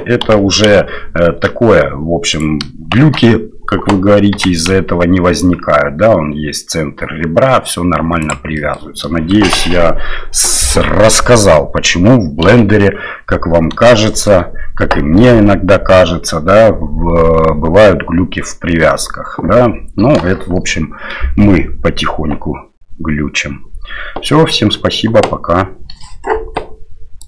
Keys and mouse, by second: 0.2 g, 3.0 shift+Tab, 4.3 g, 8.6 middle drag, 9.3 shift+middle drag, 10.8-11.6 middle drag, 12.4 KP_7, 14.0 shift+middle drag.